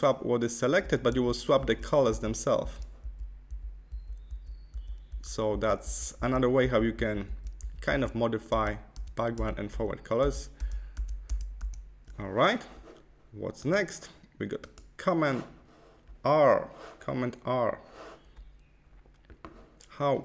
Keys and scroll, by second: 1.0 shift+x, 8.4 shift+x.